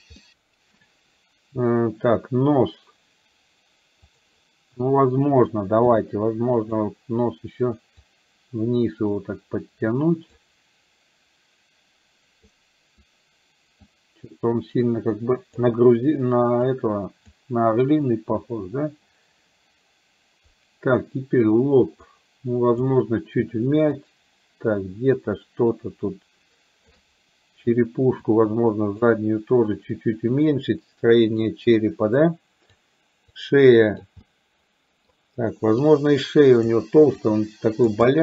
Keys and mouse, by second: 0.2 shift+middle click, 4.1 click, 8.0-10.4 drag, 8.0 f, 12.5 click, 13.9-15.7 drag, 16.7 click, 22.1 click, 24.0-26.9 shift+drag, 28.4 click, 30.5-31.5 drag, 32.4 click, 33.5 click, 34.2 middle click, 36.0 click, 37.2 click, 38.1 middle click.